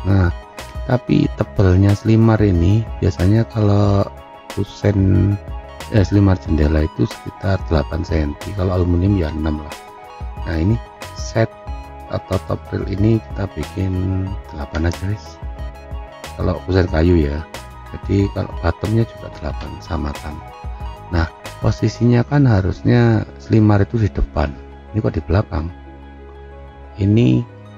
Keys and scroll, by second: 14.4 8, 14.8 Return, 19.3 8, 19.5 Return.